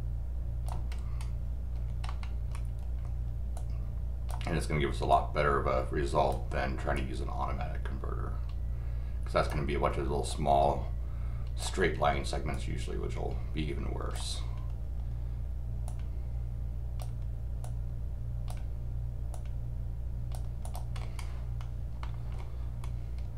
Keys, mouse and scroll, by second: 0.9 scroll down 2, 1.7 scroll down 2, 2.1 middle click, 3.5 click, 5.1-6.3 drag, 6.9-9.5 drag, 10.3-11.6 drag, 12.5-14.1 drag, 15.9 click, 17.6 click, 19.3-20.3 drag, 20.6 click, 20.9 scroll up 1, 22.0 middle click, 22.7 scroll down 1.